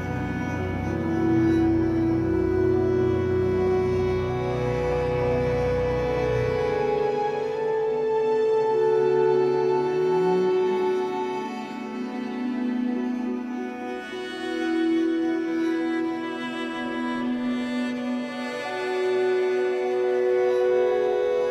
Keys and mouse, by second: 0.7-2.5 alt+drag, 2.7 ctrl+alt+click, 3.5 alt+shift+click, 5.1 ctrl+s, 5.5-6.8 alt+drag, 7.6 click, 8.9-10.4 drag, 10.7 shift+click, 11.2 shift+click, 11.5 shift+click, 12.0 alt+click, 13.4 shift+click, 14.5 shift+click, 15.8 click, 17.3 KP_Divide, 18.4-20.1 drag, 20.2 alt+a, 20.6 alt+click.